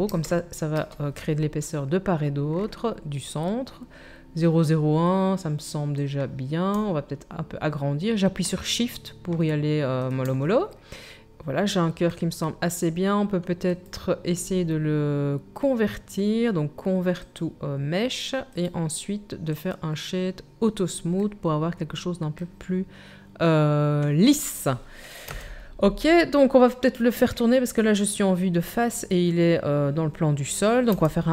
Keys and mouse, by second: 11.2 KP_1, 25.3 KP_1, 30.9 r.